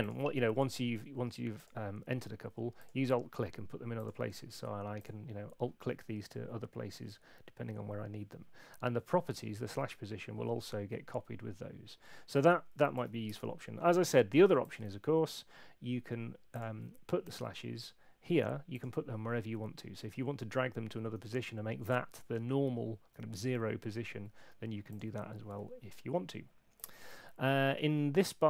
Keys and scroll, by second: 13.0 super+8, 14.8 super+1, 27.0 super+1, 27.7 super+2.